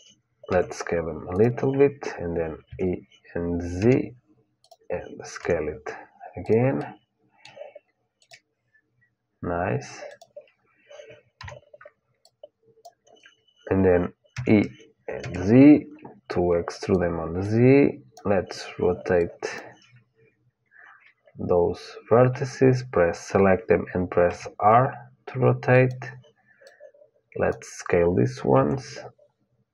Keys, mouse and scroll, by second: 0.2 s, 2.4 e, 5.1 s, 6.5-9.8 middle drag, 7.9-11.8 drag, 11.1 KP_1, 11.9-14.1 drag, 14.1 e, 17.2-20.9 drag, 24.0 r, 26.4-28.4 drag, 28.3 s.